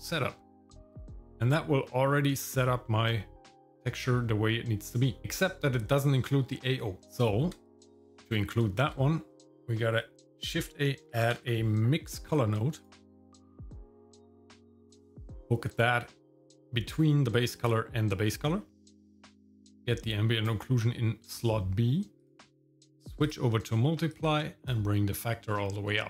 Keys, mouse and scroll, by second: 2.0-2.8 scroll down 2, 2.8 middle click, 5.2 middle click, 8.8 shift+a, 15.6 middle click, 16.0-18.4 scroll up 4, 18.4 middle click, 18.8-20.5 drag, 22.2-23.3 drag, 24.1 click.